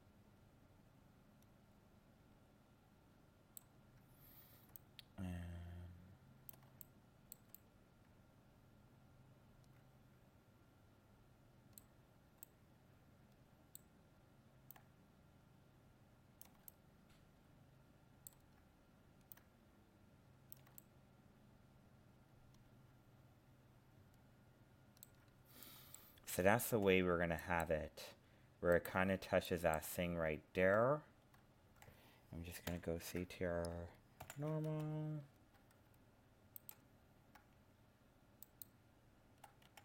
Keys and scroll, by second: 32.7 ctrl+l, 34.2 ctrl+n.